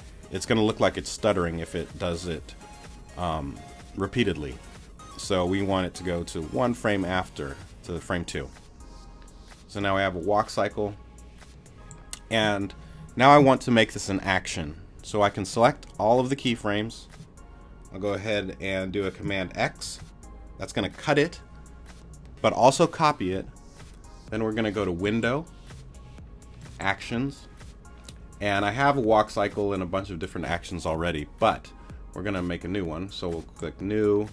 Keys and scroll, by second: 19.8 super+x.